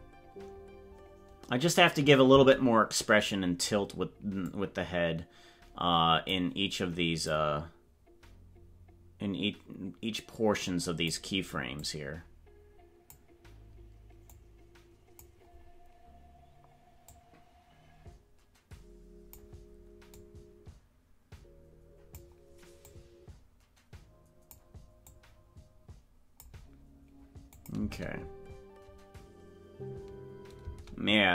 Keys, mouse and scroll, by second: 4.5-6.4 drag, 7.2 click, 10.2 click, 11.8-13.1 drag, 14.4 click, 17.0-19.4 drag, 20.2-24.6 drag, 25.0-26.4 drag, 27.6 click, 27.8 space.